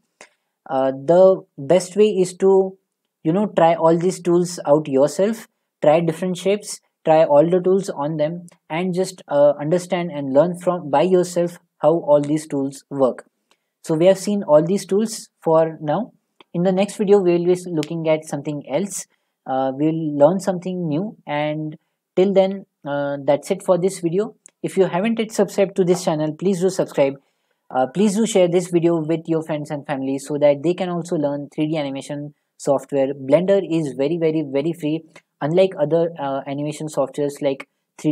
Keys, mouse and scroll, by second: 16.2-19.1 middle drag, 26.8 click.